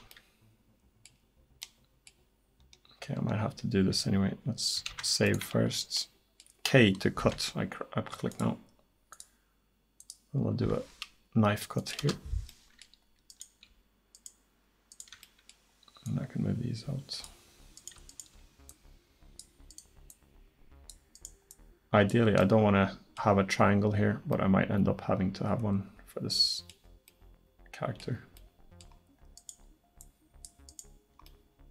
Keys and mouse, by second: 3.1-4.9 drag, 4.9 ctrl+s, 7.2 k, 12.5-16.1 drag, 16.1 middle click, 16.9 click, 18.1 click, 22.5 middle click, 23.2 click, 26.2 middle click, 27.1-28.8 drag, 30.0-31.7 middle drag.